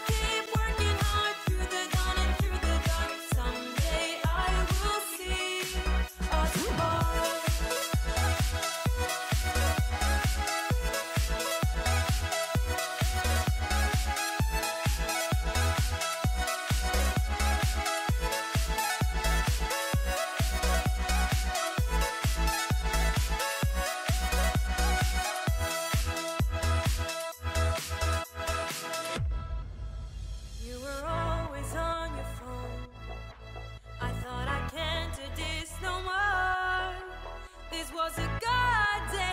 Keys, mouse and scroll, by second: 37.0 click.